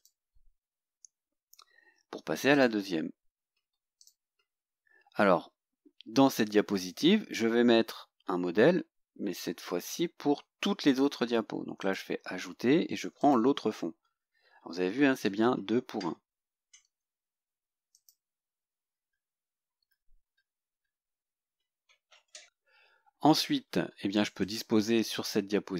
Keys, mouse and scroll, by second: 2.5 click, 4.0 click, 11.8 click, 13.2 click, 17.9 click, 24.4 click.